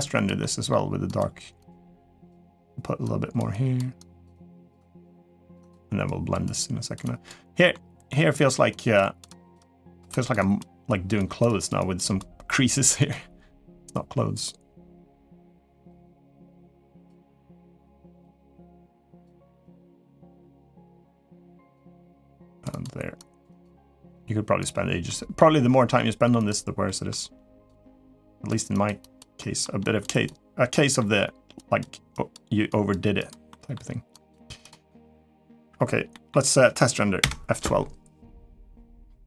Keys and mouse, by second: 0.2 middle click, 0.8 click, 1.3 click, 1.7 click, 2.8 click, 3.3 click, 3.7 click, 4.1 click, 4.4 click, 4.5 click, 4.9 click, 5.2 click, 5.4 click, 5.8 click, 6.2 click, 6.8 click, 7.3 middle click, 7.9 middle click, 8.5 click, 8.8 click, 9.0 click, 9.3 click, 9.9 click, 10.1 click, 10.6 click, 10.9 click, 11.2 click, 11.5 click, 12.4 click, 12.8 click, 17.3 click, 17.7 click, 18.3 click, 18.8 click, 19.1 click, 19.4 click, 19.8 middle click, 20.6 click, 21.1 click, 21.6 click, 21.9 click, 22.5 click, 22.9 click, 23.3 click, 23.6 click, 23.9 click, 24.8 middle click, 26.1 click, 26.6 middle click, 27.3 click, 27.6 click, 28.0 click, 28.5 click, 28.8 click, 29.1 middle click, 29.6 click, 29.9 click, 30.5 middle click, 31.3 click, 31.9 click, 32.4 click, 32.9 click, 33.3 middle click, 33.9 click, 34.4 click, 34.6 middle click, 35.9 middle click, 37.1 F12.